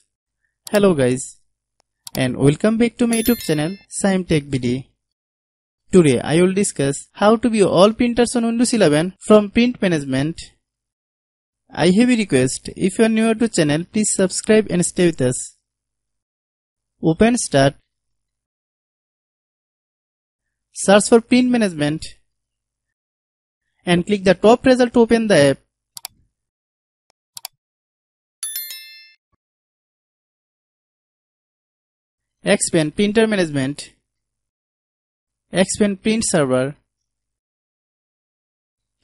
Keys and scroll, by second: 20.8-21.2 typing.